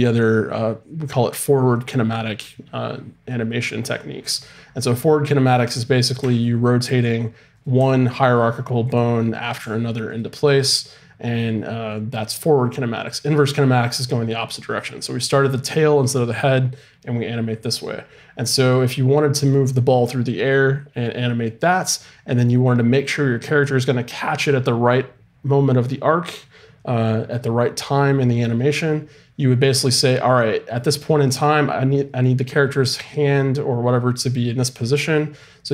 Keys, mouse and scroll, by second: 5.6-11.8 right drag, 6.2 r, 7.8 r, 8.9-11.8 drag, 9.6 r, 13.3 right click, 13.9-17.1 drag.